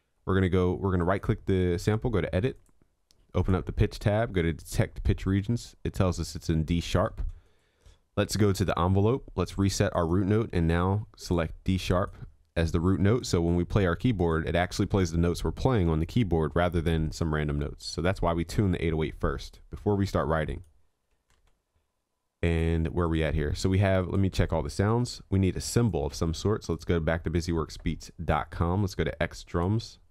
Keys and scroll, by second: 21.4 ctrl+s.